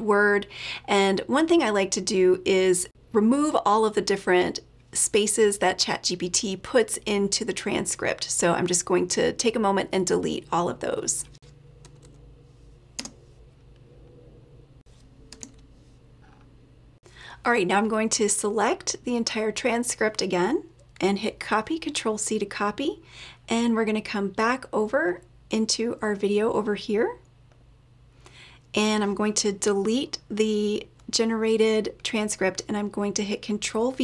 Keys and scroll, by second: 22.0 ctrl+c.